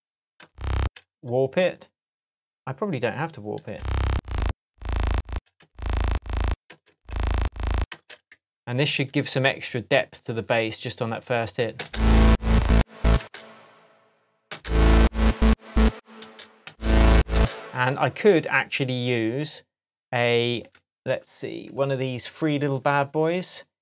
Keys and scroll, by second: 0.4 space, 3.6 space, 6.7 space, 8.6 shift+Tab, 11.8 space, 13.2 space, 14.5 space, 16.2 space.